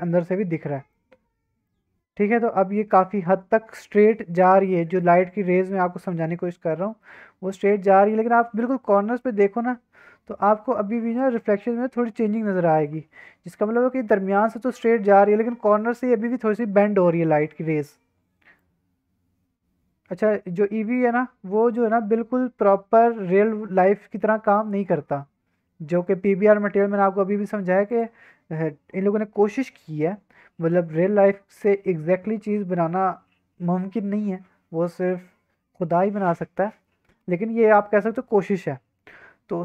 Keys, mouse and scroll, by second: 0.9-1.6 middle drag, 2.1-2.6 middle drag, 3.0-4.3 middle drag, 4.6-5.0 middle drag, 7.0-8.1 middle drag, 8.4 shift+middle click, 8.6 scroll up 2, 9.2 shift+middle drag, 9.4 scroll up 1, 12.0 scroll up 1, 12.2 scroll down 1, 12.6 shift+middle drag, 13.1 scroll down 2, 13.5 middle click, 14.4 middle drag, 14.6 middle drag, 15.1 middle drag, 15.7 middle drag, 16.6 shift+middle drag, 16.8 middle drag, 17.0 scroll up 1, 17.5 shift+middle click, 17.9-18.5 middle drag, 20.8 click, 21.6-25.9 drag, 26.4-27.9 scroll down 2, 27.9 click, 36.9 scroll up 2, 37.3-37.6 scroll down 2, 37.6-39.6 scroll up 2.